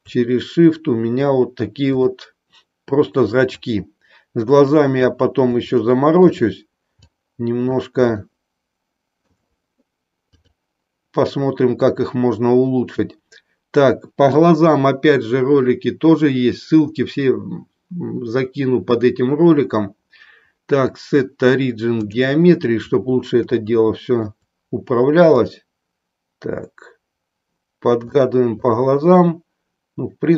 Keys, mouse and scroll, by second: 1.8 click, 3.6-5.1 drag, 5.7-6.2 shift+middle drag, 7.1 click, 8.1-9.2 shift+middle drag, 10.3-22.1 drag, 23.7-24.1 shift+middle drag, 25.5-28.1 drag, 28.5-28.8 drag.